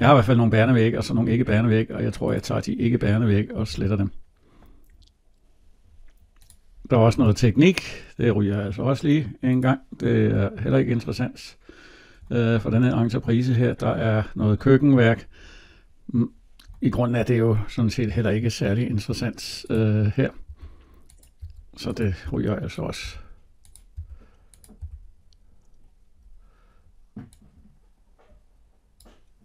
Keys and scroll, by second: 3.4 Delete, 20.3 Delete.